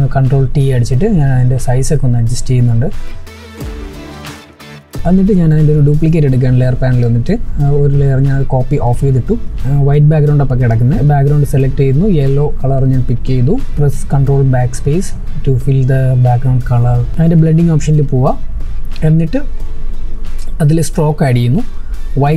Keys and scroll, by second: 4.9 ctrl+j, 13.4 ctrl+BackSpace.